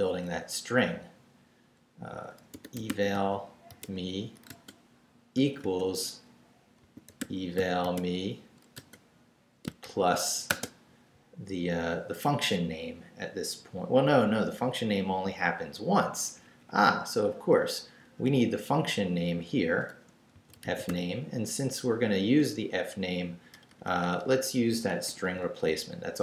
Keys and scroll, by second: 2.3-11.2 typing, 16.1 Up, 18.0 BackSpace, 20.1-21.4 typing, 23.5 BackSpace, 24.9 shift+BackSpace, 25.1 shift+', 25.8 shift+Left.